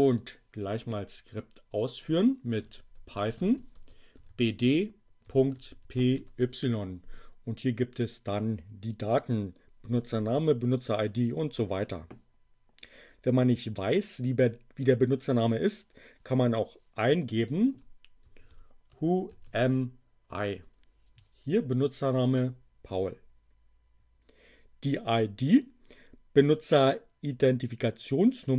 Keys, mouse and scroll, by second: 0.1 click, 2.3-6.2 typing, 17.3 click, 17.9-20.2 typing, 20.2 Return.